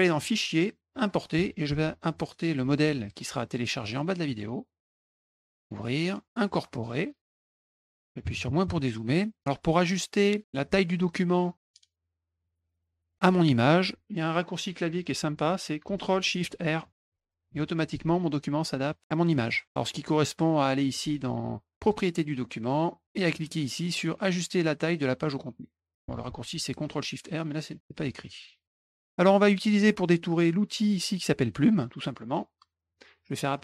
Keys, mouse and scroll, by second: 0.1 click, 0.9 click, 2.2 click, 4.6 click, 5.2 click, 5.6 click, 6.7 click, 17.0 ctrl+shift+r, 21.7 click, 28.7 middle click, 28.8 middle click, 29.0 middle click, 29.3 middle click, 33.5 click.